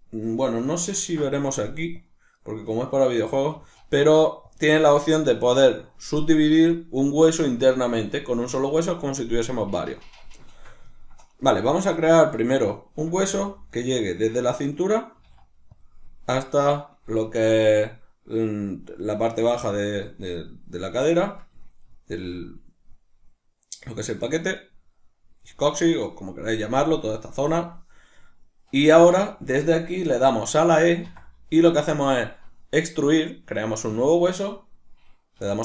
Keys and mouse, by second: 0.9 ctrl+alt+s, 2.1 click, 2.3 right click, 3.5 g, 4.5 click, 4.9 right click, 10.5 shift+middle click, 11.3 right click, 12.0 ctrl+middle click, 12.5 right click, 13.2 g, 14.2 click, 14.8 right click, 15.2 g, 15.8 click, 17.2-24.6 shift+middle drag, 24.6 right click, 28.2 right click, 28.9-35.6 shift+middle drag, 31.1 e.